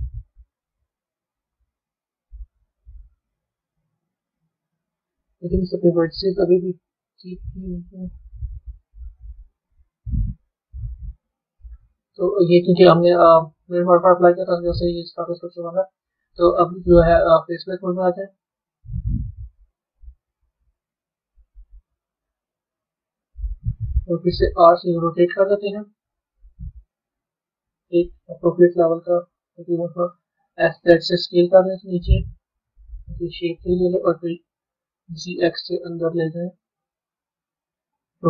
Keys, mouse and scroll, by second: 0.6-1.3 scroll down 2, 1.3-2.5 scroll up 1, 10.4 click, 14.2-17.3 middle drag, 17.3 click, 17.7-18.6 scroll down 5, 18.6-20.8 middle drag, 20.8 click, 21.9 KP_3, 22.7 KP_1, 37.7 click.